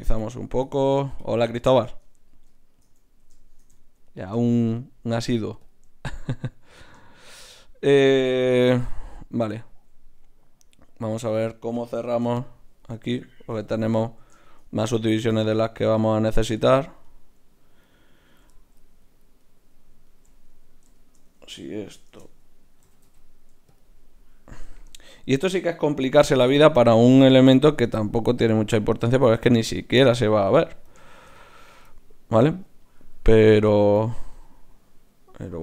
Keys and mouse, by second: 2.0 Tab, 2.5-3.8 middle drag, 5.2 ctrl+Tab, 8.5 KP_Decimal, 12.2 KP_Divide, 17.0 right click, 20.8-22.1 right drag, 22.1 shift+Tab, 22.8 g, 24.7-26.3 drag, 26.3 right click, 26.9 g, 27.8-29.8 right drag, 28.0 g, 29.2 ctrl+Tab, 30.5 click.